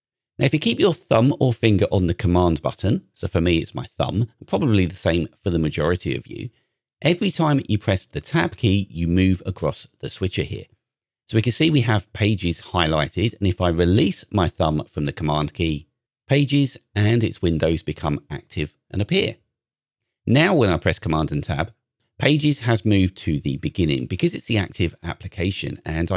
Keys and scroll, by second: 7.6 super+Tab, 20.2 super+Tab.